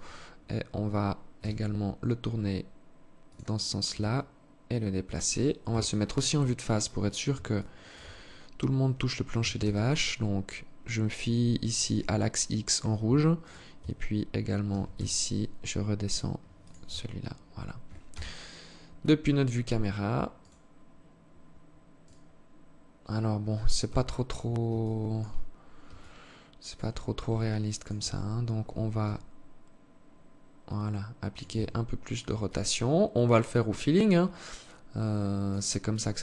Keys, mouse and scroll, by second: 0.6 r, 3.1 g, 4.9 KP_1, 6.0 scroll up 4, 6.8 alt+shift+click, 7.4-7.8 scroll up 2, 8.6 g, 12.4 Tab, 12.8 right click, 13.1 Tab, 14.0 g, 16.2 Tab, 16.6-17.4 scroll down 2, 17.4 scroll down 1, 17.4 KP_0, 19.7 right click, 21.4 right click, 23.2 KP_3, 24.1 alt+shift+click, 25.3 alt+click, 26.7 alt+click, 27.4 Tab, 28.4 r, 30.9 Tab, 31.8 alt+click, 35.3 alt+click, 36.0 KP_0.